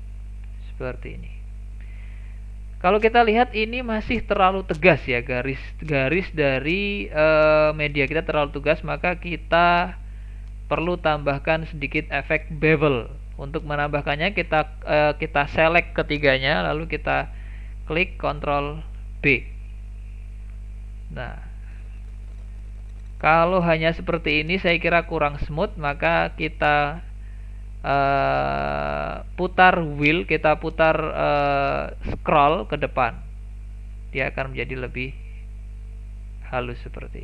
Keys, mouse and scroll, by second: 0.0 middle click, 0.7-1.1 scroll up 1, 1.1 middle click, 1.5-1.9 scroll down 1, 1.9-6.5 shift+middle drag, 6.7-9.0 middle drag, 9.0 click, 10.3 shift+click, 11.0 shift+click, 11.5 scroll down 1, 11.9 middle click, 12.3-12.7 scroll up 2, 12.7-15.7 shift+middle drag, 19.2 ctrl+b.